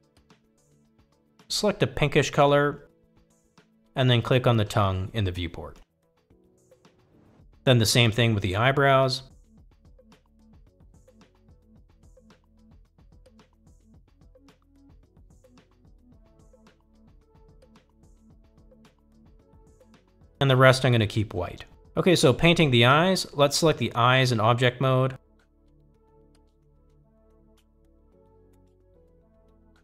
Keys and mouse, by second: 0.2 click, 4.8 click, 8.4-8.9 drag, 11.9-13.2 drag, 15.2-19.1 drag, 20.3 click, 25.7-26.8 drag.